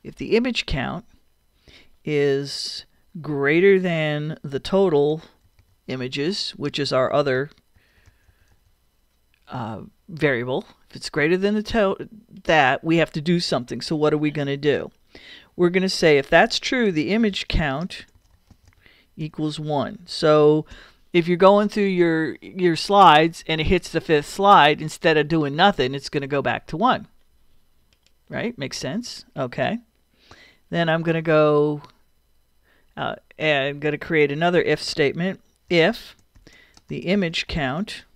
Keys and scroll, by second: 3.7 shift+., 4.8-8.3 typing, 16.5-18.8 typing, 20.1 |, 31.1 Return, 35.5-38.1 typing.